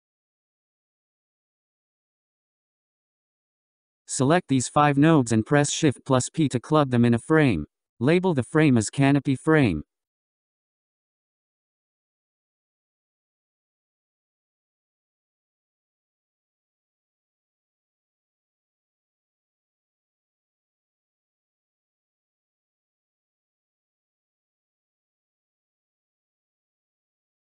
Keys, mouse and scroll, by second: 3.6 click, 6.1-8.8 drag, 8.8 shift+p, 10.5-13.7 drag, 20.6-22.9 drag, 26.0 n, 26.8-27.5 scroll down 5.